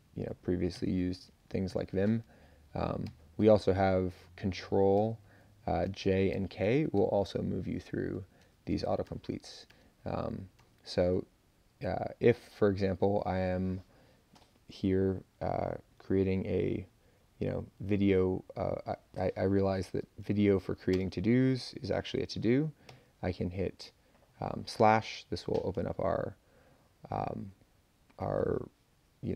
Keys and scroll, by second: 0.7 [, 1.7 ctrl+j, 2.3 a, 3.0 ctrl+j, 4.9 ctrl+j, 5.8 ctrl+k, 6.3 ctrl+j, 6.6 ctrl+j, 6.9 ctrl+j, 7.4 ctrl+k, 7.7 ctrl+k, 8.1 ctrl+k, 9.0-10.6 typing, 11.7 Up, 11.9 Up, 12.0 Up, 12.2 Up, 12.3 Up, 12.4 Up, 12.6 Up, 12.7 Up, 13.0 Up, 16.4 Down, 16.7 Down, 17.9 Up, 18.3 Up, 20.9 space, 21.5 Left, 22.8 /, 25.7 Down.